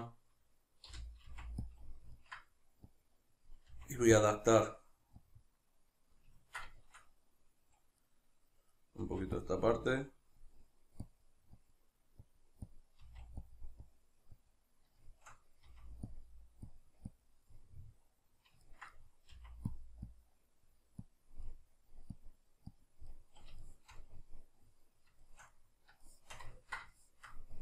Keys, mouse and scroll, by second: 0.9 g, 1.7 click, 1.9-2.9 middle drag, 2.9-4.3 drag, 3.7 f, 6.4-9.5 ctrl+middle drag, 9.0 f, 9.5 click, 13.0 click, 13.0 f, 15.0-16.2 shift+middle drag, 15.7 f, 16.2 click, 17.5-19.8 middle drag, 19.3 f, 19.8 click, 21.4 middle click, 22.1-23.1 drag, 23.1-27.6 middle drag.